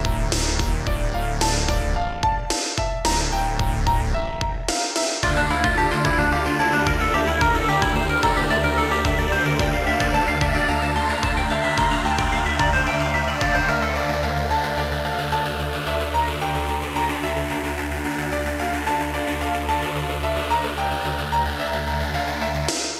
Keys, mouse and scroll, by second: 0.1 click, 0.2 click, 0.7 Left, 0.9 Left, 1.3 Left, 1.5 Right, 1.9 Right, 2.0 Right, 3.1 Left, 3.2 Left, 3.4 Left, 3.9 Right, 4.3 Right, 5.9 middle click, 7.0 shift+middle click, 7.6 ctrl+s, 8.5 middle click, 9.4-9.7 typing, 10.3 click, 12.2 click, 18.3 middle click, 19.0 shift+middle click, 19.2 middle click, 20.1 click, 21.8 shift+middle click, 21.9 middle click, 22.1 middle click, 22.5 scroll up 2.